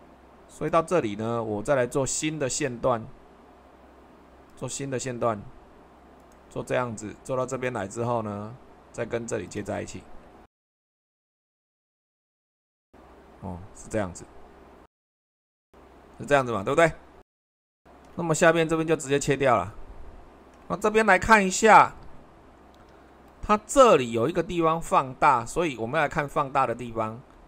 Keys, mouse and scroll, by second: 10.7 Escape, 11.1 Escape, 12.0 c, 16.3 click, 17.1-19.1 middle drag, 22.9 super+1.